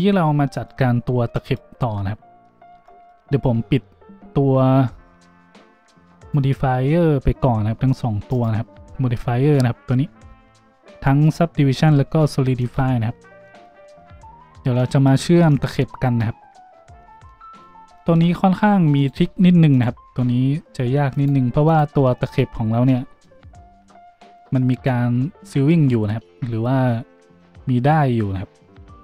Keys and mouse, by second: 0.0-6.3 drag, 1.8 Tab, 2.6 Tab, 6.3-8.3 middle drag, 8.3 click, 8.4-11.2 middle drag, 11.2 click, 11.5-19.0 middle drag, 12.9 Tab, 19.0 click, 19.0-21.2 middle drag, 21.2-29.0 drag, 21.2 g, 24.3 middle click, 24.3 right click.